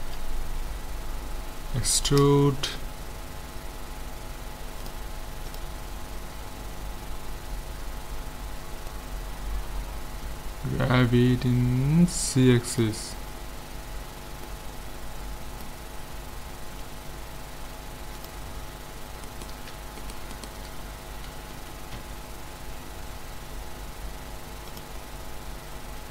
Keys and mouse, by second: 1.8 e, 4.8-6.5 drag, 8.9-10.6 drag, 14.1 z, 14.5-17.3 drag, 18.2-20.0 drag, 20.1-21.7 right drag, 21.6 KP_1, 22.0 z, 24.7-26.1 drag.